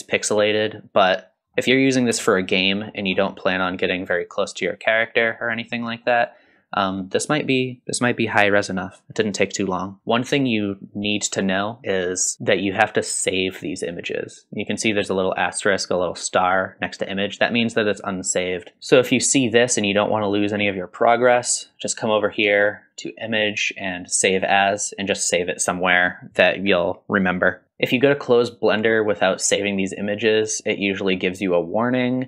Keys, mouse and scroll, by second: 0.9-1.3 scroll down 3, 1.6 middle click, 2.2 shift+middle drag, 2.5 middle drag, 3.1-3.6 scroll down 2, 3.7-6.0 middle drag, 6.2 scroll up 1, 6.6-6.9 middle drag, 21.6-24.5 drag.